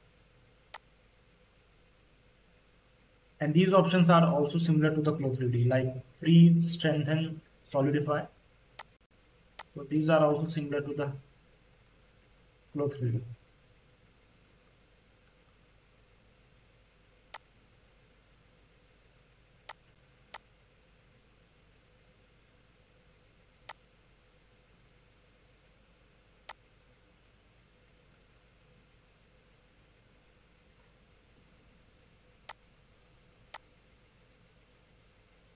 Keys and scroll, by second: 0.3 q, 10.3 space, 21.4 x, 28.4 c.